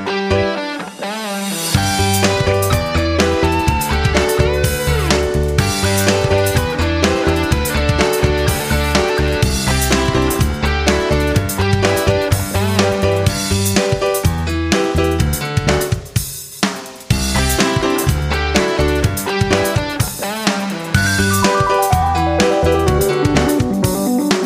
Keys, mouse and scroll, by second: 4.2 F9, 5.9 Tab, 9.3 click, 16.9 ctrl+z, 17.1 ctrl+z, 17.8 ctrl+z, 18.9 click, 23.1 F9, 24.1 click.